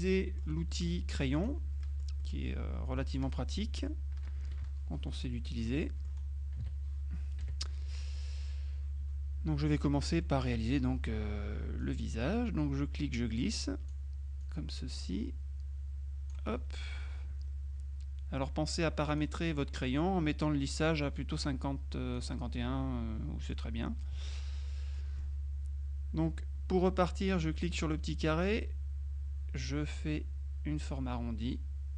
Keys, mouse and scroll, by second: 0.1 click, 1.4 click, 2.3 click, 5.8 click, 7.5 KP_Subtract, 8.2 click, 10.3 click, 11.9-14.5 drag, 19.2 click, 20.8 click, 23.5 middle click, 24.6-25.8 middle drag, 28.5-31.9 drag.